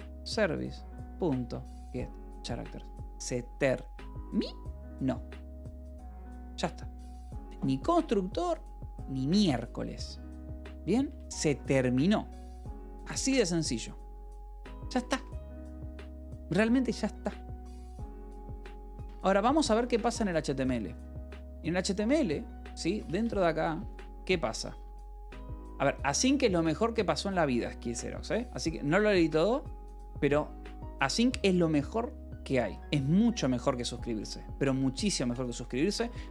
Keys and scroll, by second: 0.1 Return, 0.9 ., 1.3 g, 1.6 Return, 2.1 Escape, 3.6 ctrl+s, 10.9 Return, 14.0 BackSpace, 14.7 Escape, 15.7 ctrl+s, 18.9-20.4 typing, 21.2 Return, 22.6-25.2 typing, 25.7 Escape, 32.7-33.6 typing, 33.7 Return, 35.5 c.